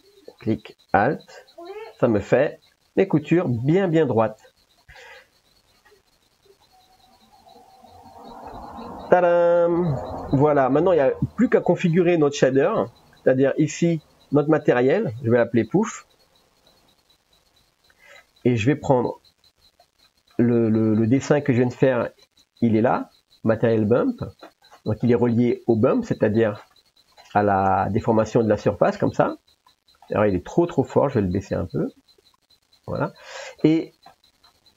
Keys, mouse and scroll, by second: 4.7 click, 7.4 click, 8.5-9.7 middle drag, 10.9 click, 12.1 middle click, 13.1 middle click, 13.7 shift+middle click, 14.8-17.3 drag, 18.3 middle click, 19.4 click, 20.2 middle click, 21.0 middle click, 22.4 ctrl+s, 24.6-25.3 drag, 25.6 middle click, 26.4 click, 27.7 ctrl+s, 28.4 middle click, 30.2 middle click, 31.5-33.0 drag, 33.3 middle click, 34.1 middle click.